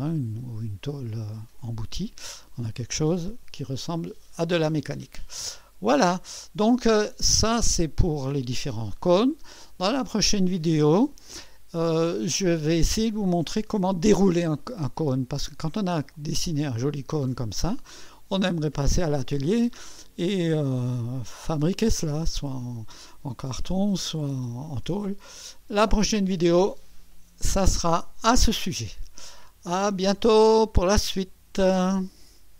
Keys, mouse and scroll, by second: 3.1 2, 4.3-4.9 scroll down 1, 4.9-6.5 scroll down 1, 6.5-9.3 drag, 12.9 click, 17.1-25.3 drag.